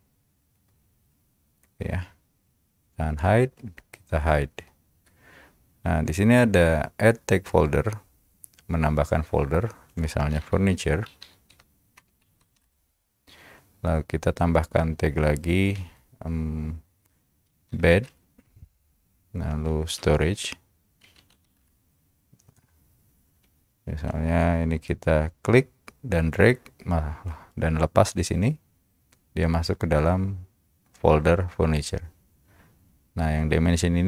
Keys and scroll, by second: 4.5 Caps_Lock, 10.1-12.5 typing, 12.8 Return, 17.3-18.2 typing, 19.9-22.0 typing, 23.5 Return.